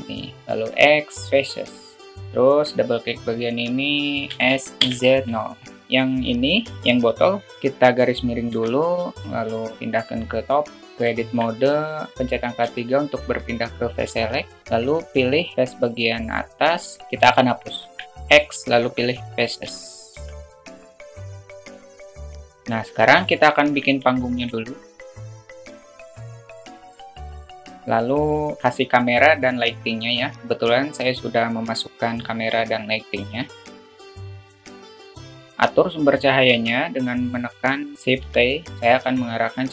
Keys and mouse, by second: 0.4 x, 2.2 alt+z, 2.4 click, 2.6 click, 4.1 s, 5.8 Tab, 11.0 shift+Tab, 11.0 alt+shift+middle drag, 12.5 3, 14.6 click, 16.2 alt+middle click, 17.6 x, 20.0 Tab, 20.6 /, 21.1 alt+shift+middle click, 21.5 click, 21.6 alt+shift+middle drag, 22.0-22.4 drag, 23.2 alt+shift+middle click, 24.0 shift+a, 25.0-27.1 typing, 25.7 alt+middle click, 25.8 Tab, 26.6 ctrl+b, 26.9 Tab, 31.4 click, 32.8 click, 33.6 alt+middle drag, 33.9 alt+middle drag, 34.2 click, 34.4 alt+middle click, 34.6 click, 35.0 click, 35.2 alt+middle click, 38.2 shift+t, 38.8 alt+middle click.